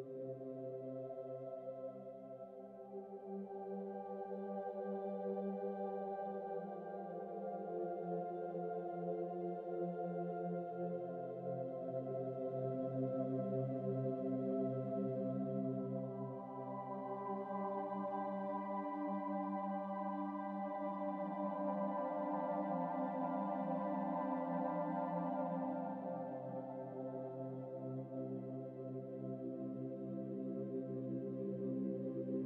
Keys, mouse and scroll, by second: 4.5-6.1 shift+middle drag, 9.2-9.6 middle drag, 9.6-10.2 scroll up 8, 10.6 shift+right click, 11.0 click, 12.1 shift+right click, 12.5-12.8 scroll down 12, 12.8-13.7 scroll up 9, 13.8 alt+a, 14.4 shift+a, 15.0 shift+a, 18.8 KP_Decimal, 19.0 KP_Decimal, 19.6 s, 21.8 scroll up 2, 22.0 middle click, 22.4-23.0 scroll up 3, 24.1 s, 26.0 middle click, 26.5 Tab, 26.8 Tab, 27.5 click, 28.8 scroll up 3, 29.1 middle click, 30.0 click, 31.3 click.